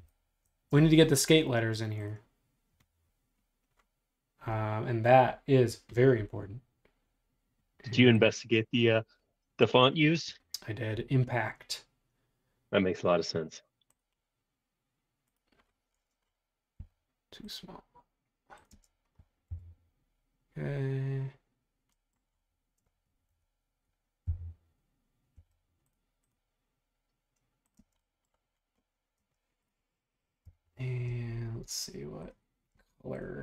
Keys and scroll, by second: 16.7 s, 18.8 space, 19.5 m, 23.3 q, 24.2 Left, 25.4 Right, 27.9 space, 29.2 space, 30.5 b.